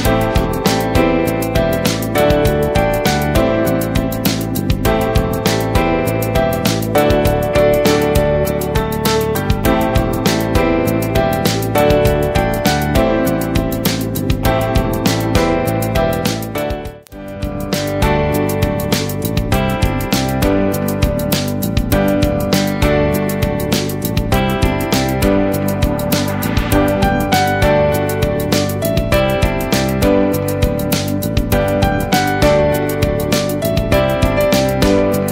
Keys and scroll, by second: 0.1 ctrl+shift+,, 3.1 ctrl+z, 3.8 ctrl+shift+,, 5.2 alt+Up, 9.0 ctrl+Return, 19.0 End, 24.8 Left, 27.6 Right, 29.3 Right, 31.2 ctrl+Return, 33.1 ctrl+a.